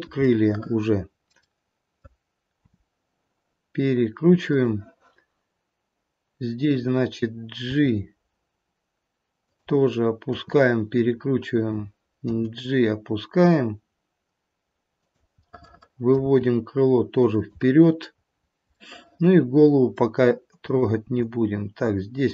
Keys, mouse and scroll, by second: 0.3 middle click, 1.1 middle click, 1.3 middle click, 1.9 middle click, 2.7 r, 6.5 click, 7.6 g, 10.2 r, 12.2 g, 15.5 middle click, 16.3 g, 18.3-18.9 scroll up 2, 18.9 middle click, 19.4 middle click, 20.6 middle click, 20.6 click, 21.3 g.